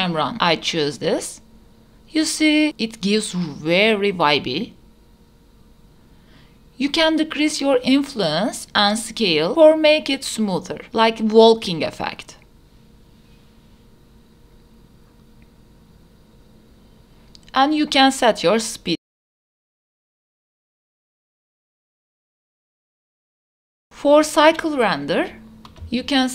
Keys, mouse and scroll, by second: 2.8 space, 7.8 space, 9.2 click, 12.6 click, 12.9 space, 15.5 space, 16.2-17.3 drag, 17.6 space, 19.0 space, 19.5 click, 20.7 click, 20.9 click, 21.1 space, 21.7 space, 21.9 click, 22.7 click, 23.6 click.